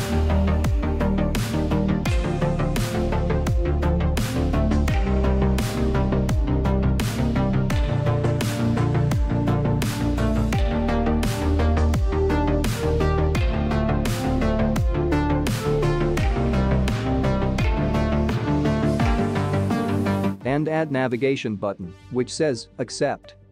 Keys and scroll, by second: 3.0 ctrl+v, 5.4 space, 5.6 space, 9.9 space, 13.2 space, 13.8 space, 16.4 space, 17.2 space.